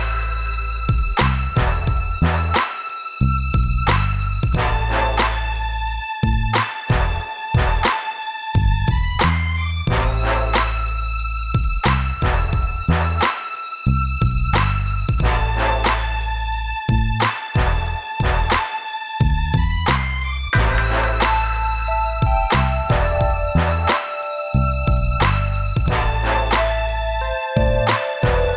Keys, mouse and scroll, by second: 1.3 click, 3.7 scroll up 1, 4.5 click, 4.6 click, 5.4 click, 8.1 scroll down 1, 9.8 click, 10.0 click, 10.8 click, 13.1 click, 15.9 click, 16.6 click, 18.1 click, 19.4 click, 22.3 click, 24.1 click, 24.9 click, 28.4 scroll up 1.